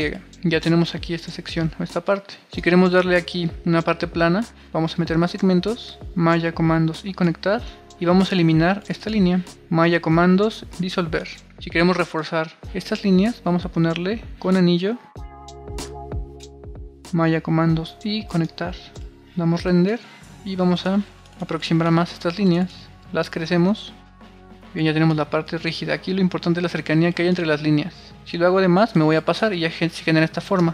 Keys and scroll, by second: 1.7 super+r, 11.2 super+r, 19.0 super+r, 24.1 super+r, 29.7 super+r, 30.6 super+z.